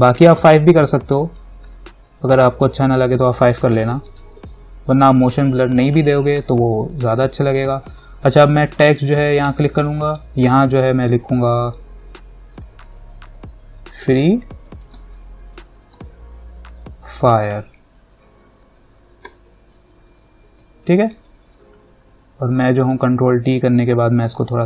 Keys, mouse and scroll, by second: 1.9 click, 4.0 t, 4.6 ctrl+=, 5.8 space, 6.1 click, 6.3 space, 9.6 click, 12.8 shift+f, 13.0 r, 14.8 typing, 16.2-17.6 typing, 18.7 click, 19.5 e, 21.4 click, 23.1 ctrl+t, 24.3-24.6 alt+drag.